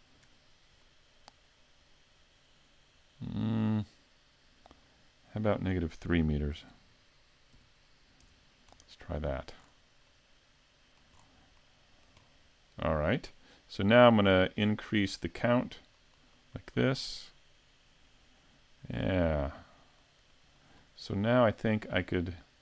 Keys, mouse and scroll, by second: 0.8 middle click, 2.6 scroll down 4, 4.9 click, 9.7 scroll down 2, 10.1 middle click, 11.2 scroll down 2, 11.6 shift+middle click, 12.2 middle click, 13.3 scroll down 2, 14.4 shift+middle click, 14.4 scroll down 1, 15.7 click, 16.0 click, 16.2 click, 16.4 click, 16.5 click, 16.9 click, 17.0 click, 19.0 middle click, 20.3 shift+middle click, 21.8 middle click.